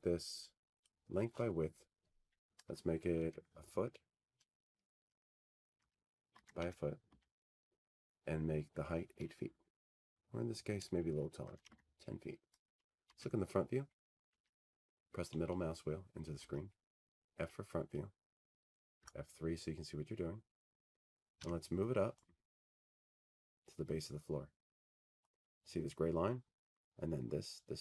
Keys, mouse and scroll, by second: 2.7 click, 3.9 click, 6.5 click, 11.4 1, 11.9 Tab, 12.2 1, 12.7 Tab, 16.8-18.6 typing, 19.8 f, 21.0-21.3 scroll, 23.2 middle click, 23.5 middle click, 24.5 F3, 25.4-26.0 scroll, 27.1 w.